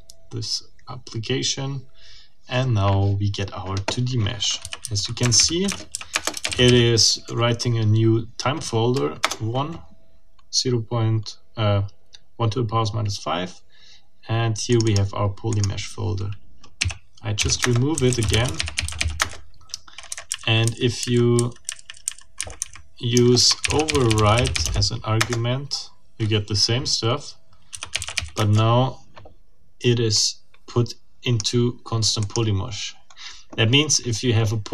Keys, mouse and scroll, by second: 4.6-6.4 typing, 9.2 Return, 14.7 click, 15.5 click, 16.8-19.4 typing, 17.6 Return, 20.1 Down, 20.3 Up, 22.4 Down, 23.1-25.0 typing, 25.2 Return, 27.5-28.5 typing, 30.1-31.6 drag, 32.2 click.